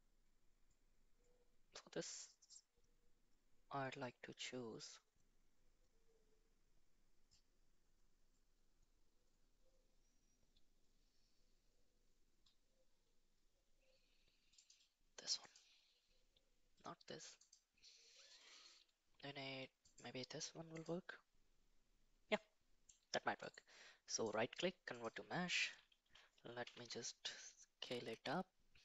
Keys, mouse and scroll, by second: 17.4 click, 22.3 middle click, 23.5-25.0 right drag, 26.6 s.